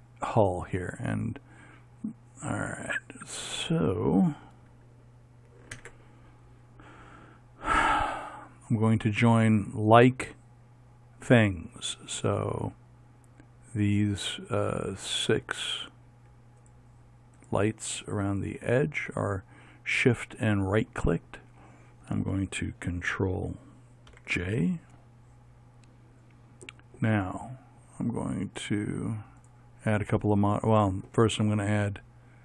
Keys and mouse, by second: 2.7 z, 3.5 middle click, 5.9 ctrl+KP_7, 16.7-20.3 right drag, 24.2 ctrl+j, 29.9 middle click, 30.5-31.6 drag.